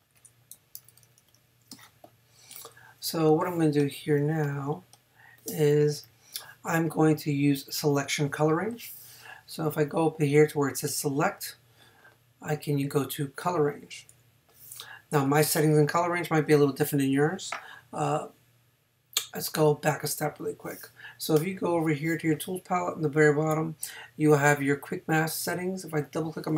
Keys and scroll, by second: 2.7 space.